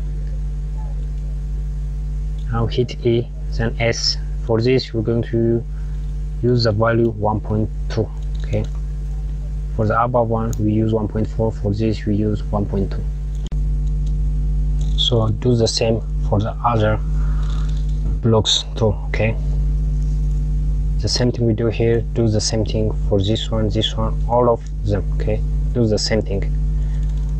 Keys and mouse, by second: 2.4 e, 12.5 click, 17.0 click, 27.0 click.